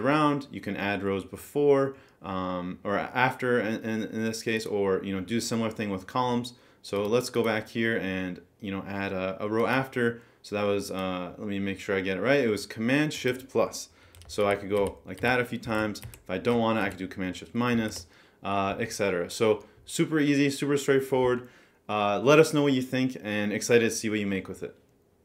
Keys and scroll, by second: 14.4 shift+super+=, 16.1 Down, 16.8 shift+super+-.